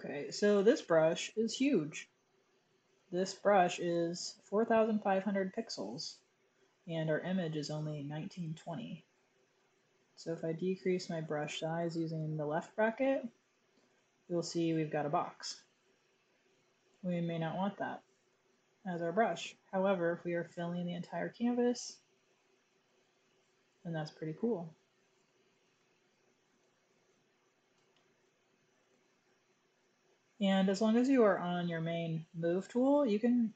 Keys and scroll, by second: 8.6-9.5 typing, 11.3 typing, 13.3-14.0 typing, 17.2 super+z, 18.1-21.3 typing, 25.1-27.7 typing, 29.3 shift+-.